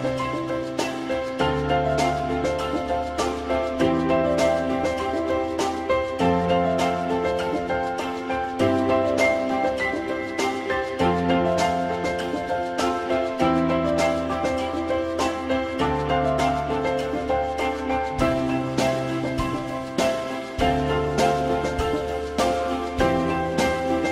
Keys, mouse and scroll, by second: 8.9 alt+middle click, 20.8 alt+x, 21.7 click.